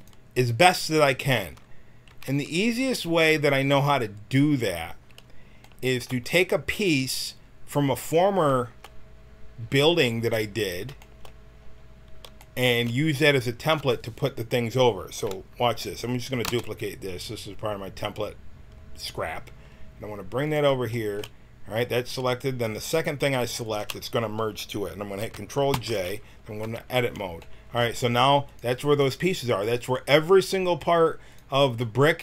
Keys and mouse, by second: 2.1 Tab, 2.6 a, 6.7 click, 7.7 middle click, 7.8 click, 8.4 middle click, 16.4 shift+d, 23.6-25.7 drag, 25.7 ctrl+j, 26.6 Tab, 28.4 right click, 29.9-32.2 drag.